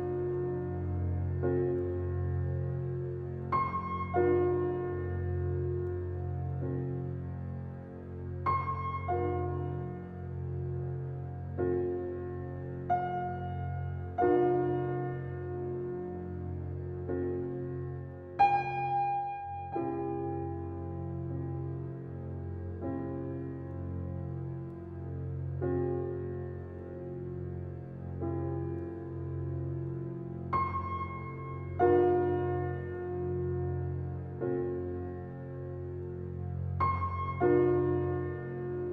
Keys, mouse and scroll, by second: 1.4 scroll up 2, 1.8-2.2 shift+middle drag, 2.2-2.8 scroll up 1, 2.8-4.7 drag, 6.1 scroll down 3, 6.5-7.3 middle drag, 7.3 scroll down 2, 7.6-8.4 middle drag, 8.4 scroll up 2, 8.6-9.4 middle drag, 9.4-9.8 scroll up 1, 9.8-10.7 shift+middle drag, 10.7 scroll up 5, 12.4-13.3 drag, 13.3 scroll down 3, 13.6-13.9 middle drag, 13.9 scroll down 3, 14.7 g, 16.4-17.1 middle drag, 17.1 scroll down 3, 17.5 click, 17.8-20.8 middle drag, 30.8-32.2 middle drag, 32.2 click, 32.8 scroll down 4, 33.4-34.9 shift+middle drag, 34.9 scroll down 1, 35.2-38.8 shift+middle drag.